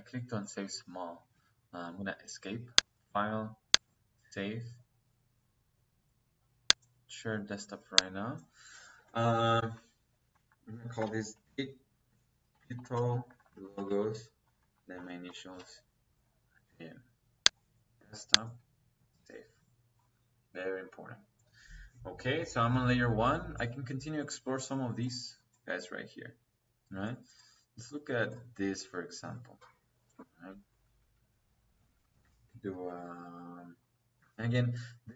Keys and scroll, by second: 1.2 Escape, 9.5 Caps_Lock, 10.6 d, 10.9 Caps_Lock, 11.0 i, 11.2 g, 12.7-15.2 typing, 13.2 Caps_Lock, 13.5 Caps_Lock, 14.6 Caps_Lock, 30.6 Escape, 31.7 Escape, 33.0 p, 33.1 Escape.